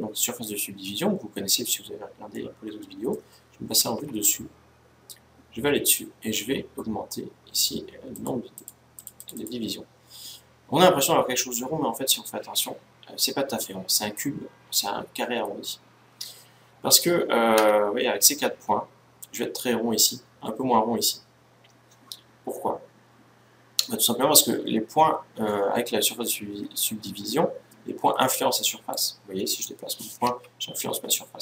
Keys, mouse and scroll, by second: 2.0-3.6 middle drag, 3.6 KP_7, 5.0-6.9 scroll up 1, 6.9-7.3 scroll up 1, 7.3 middle click, 7.8-11.0 drag, 17.3 Tab, 28.6-30.4 right drag, 30.0 g.